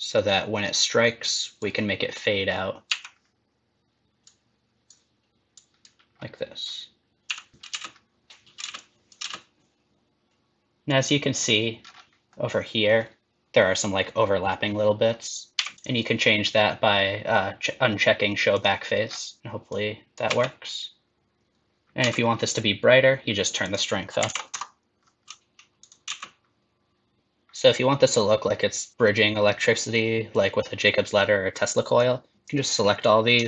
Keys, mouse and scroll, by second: 2.9 i, 4.2 click, 5.5 click, 7.2 i, 7.7 space, 8.6 space, 8.7 click, 9.2 space, 10.8 click, 11.8 scroll up 4, 12.3 middle click, 15.5 click, 15.5 n, 15.7 click, 18.5 click, 19.0-19.4 scroll down 4, 19.7 click, 20.2 space, 21.8 n, 22.0 space, 23.6 click, 25.8 click, 26.0 space, 32.0 click.